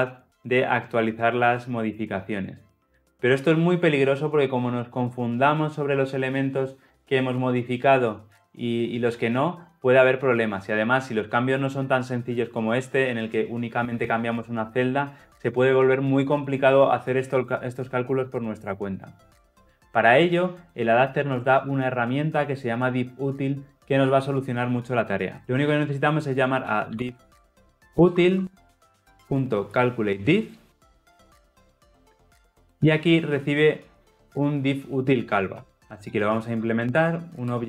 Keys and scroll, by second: 28.1 Return, 32.3 ctrl+p, 37.5 Return.